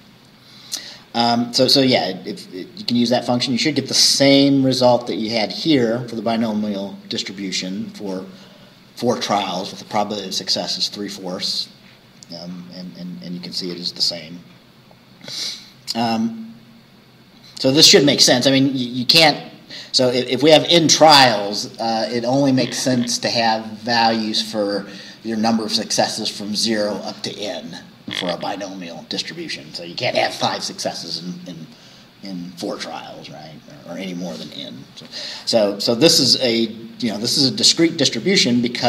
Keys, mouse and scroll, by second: 4.5-4.9 scroll up 2, 11.6-11.9 scroll down 2, 13.1 scroll up 2, 15.9 scroll down 2.